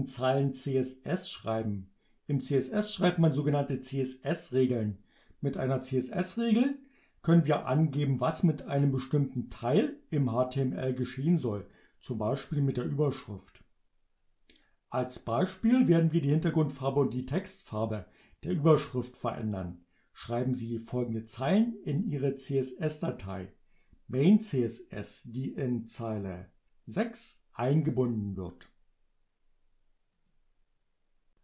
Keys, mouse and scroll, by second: 26.2 click, 30.2 click.